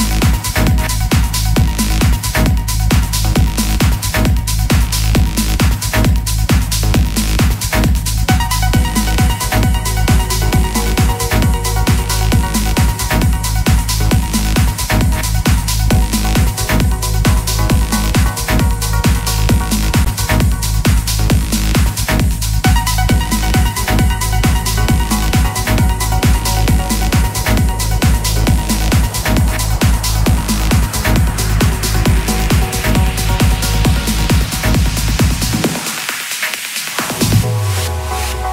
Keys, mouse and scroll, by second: 3.3 right click, 6.8 click, 25.0 Delete, 25.7 click, 26.3 Delete.